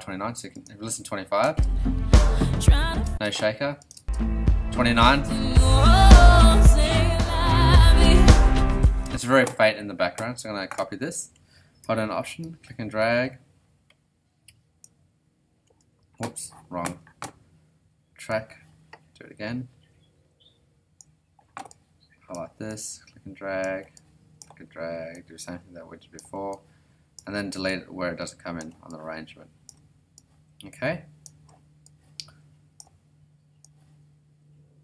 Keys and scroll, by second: 1.4 space, 3.0 space, 9.0 space, 16.1 alt+super+z, 16.7 super+z.